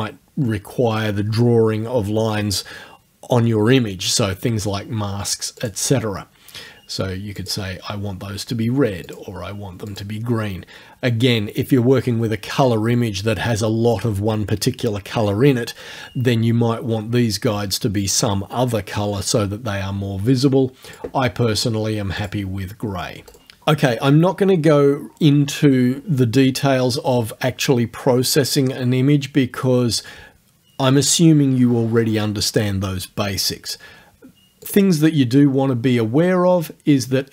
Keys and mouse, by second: 5.6 click, 7.4 click, 9.1 click, 9.9 click, 20.9 click, 22.2 click, 34.7 click.